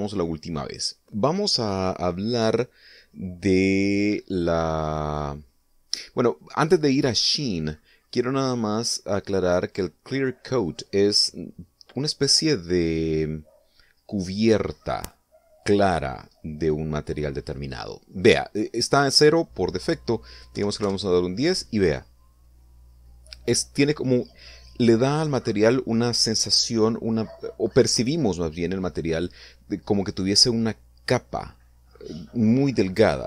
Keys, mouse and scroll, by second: 6.6 middle click, 16.8-17.1 scroll up 1, 19.2 click, 20.9 1, 21.1 0, 21.2 Return.